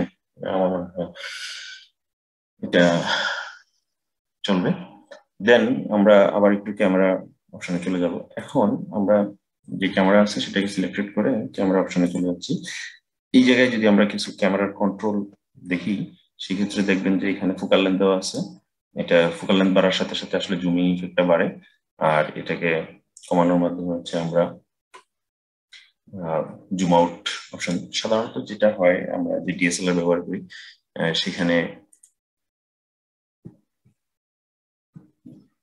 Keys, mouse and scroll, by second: 8.2 click, 10.5 click, 11.9 click, 18.2-21.2 drag, 31.7-34.8 drag.